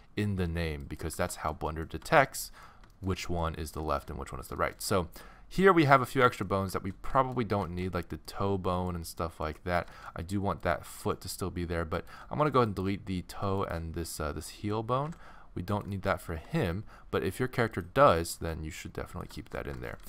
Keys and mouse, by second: 0.8 click, 0.9 middle click, 1.1-3.3 middle drag, 7.7 middle click, 10.6-15.3 middle drag, 15.0 x, 15.7-17.6 middle drag, 16.3 g, 18.2-19.4 drag, 18.4 g, 19.4 middle click, 20.0 a.